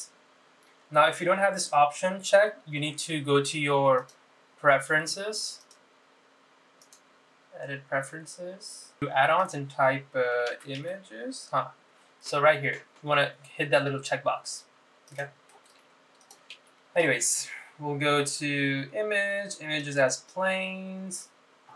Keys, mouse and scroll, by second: 5.1-6.4 drag, 7.0-9.0 drag, 17.4 click, 17.6 shift+a.